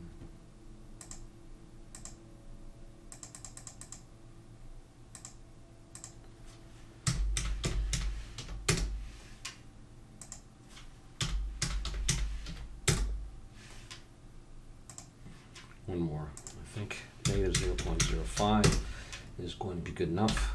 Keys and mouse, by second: 1.0-7.8 drag, 14.9-18.1 drag, 20.2 n.